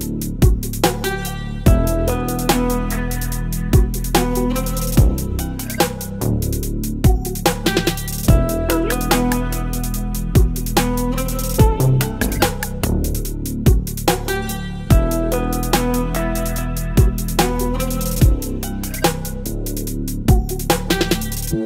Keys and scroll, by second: 18.5 ctrl+t, 21.3 Return.